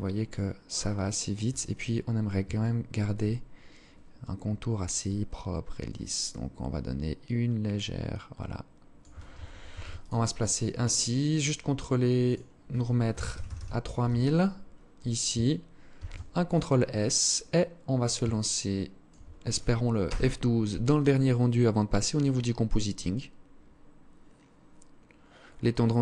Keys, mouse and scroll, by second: 0.8-1.3 scroll up 3, 1.6 alt+shift+click, 3.9 shift+click, 8.7 ctrl+s, 10.3 click, 11.3 click, 15.0 ctrl+s, 16.2-16.6 scroll down 3, 17.4 alt+shift+click.